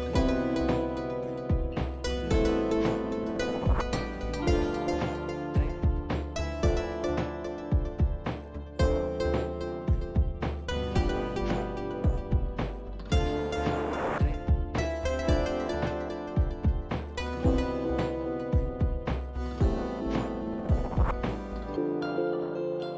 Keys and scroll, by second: 16.5 ctrl+z, 19.3 Delete, 21.0 Tab, 21.6 1.